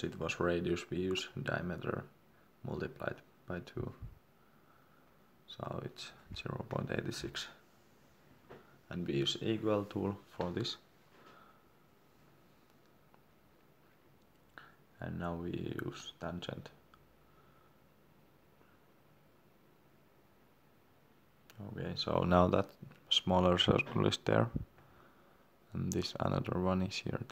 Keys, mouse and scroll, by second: 0.7 d, 1.3 click, 2.5 0, 3.5 3, 4.2 shift+3, 4.7 2, 5.5 Return, 7.4 Escape, 7.9 click, 8.7 scroll down 1, 9.6 click, 13.3 Escape, 14.1 click.